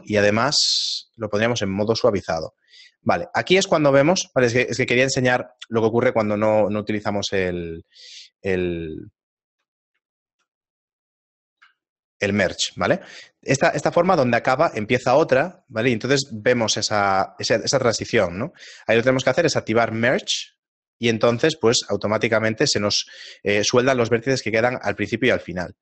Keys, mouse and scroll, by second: 0.8 click, 1.7 shift+middle click, 2.7-4.6 scroll up 5, 5.1 middle click, 5.1-6.1 scroll up 1, 8.5 shift+middle click, 9.9 middle click, 10.2 shift+middle click, 11.8 ctrl+middle click, 12.8 middle click, 19.9 click, 23.0-24.3 scroll down 9, 24.0 middle click, 24.6 shift+middle click.